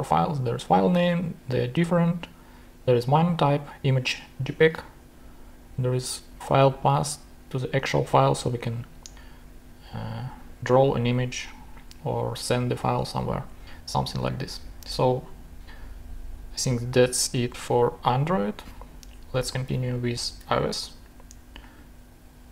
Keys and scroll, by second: 19.7 shift+super+Tab.